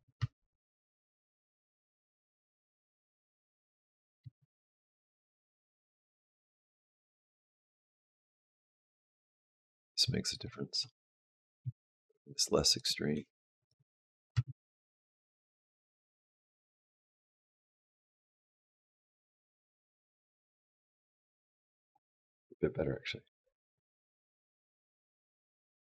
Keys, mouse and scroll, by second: 0.0 space, 4.0 space, 5.1 click, 7.5 click, 8.1 g, 10.5 r, 11.4 g, 12.5 click, 13.0 r, 14.0 click, 14.1 space.